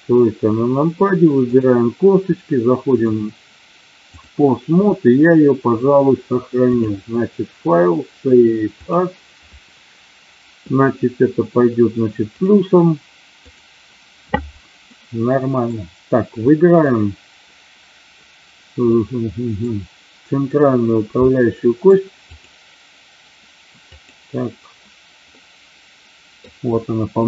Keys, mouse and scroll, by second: 1.5 click, 2.9-4.3 drag, 6.6-9.0 drag, 14.8 middle click, 16.5 middle drag, 18.9 middle click, 21.3-21.8 middle drag, 22.3-25.3 drag, 27.1 KP_3.